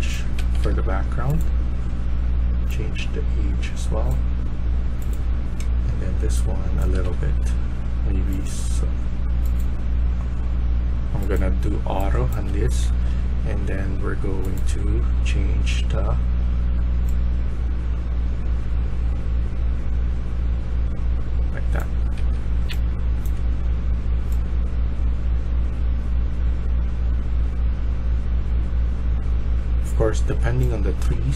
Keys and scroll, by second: 0.3 Escape, 0.5 Escape, 6.7-7.4 typing, 11.7-12.7 typing, 22.1 Escape, 22.6-23.2 a, 30.9 d.